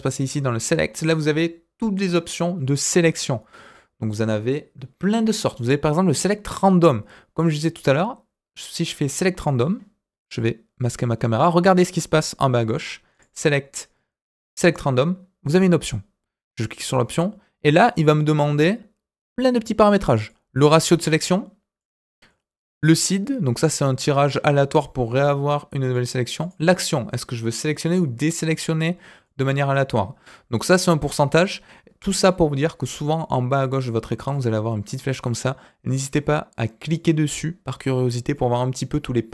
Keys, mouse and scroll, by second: 0.1-6.9 drag, 7.3 click, 7.7-9.6 drag, 13.1-14.7 drag, 16.6 click, 20.2-21.8 drag, 22.2-25.9 drag, 26.4-28.4 drag, 29.2-32.9 drag, 34.3 click, 36.8 click, 38.3-39.3 drag.